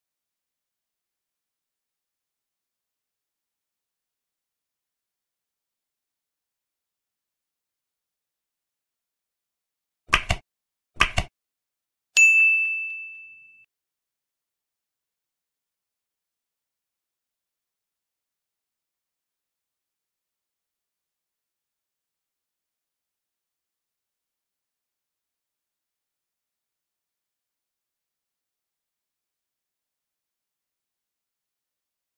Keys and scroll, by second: 0.1 ctrl+s, 0.3 Left, 0.6 space, 2.3 ctrl+s, 13.8 ctrl+s, 15.7 space, 21.6 Left, 22.3 ctrl+s, 23.9 ctrl+s, 24.4 F9, 26.2 space, 27.7 ctrl+e, 28.0 Right, 29.2 Up, 29.3 ctrl+Right, 30.0 space, 30.2 ctrl+s.